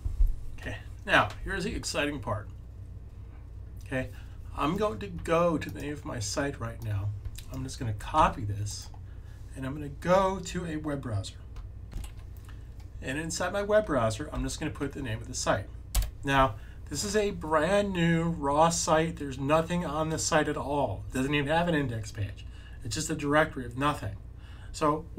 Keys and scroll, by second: 8.0 super+c, 14.2 super+v.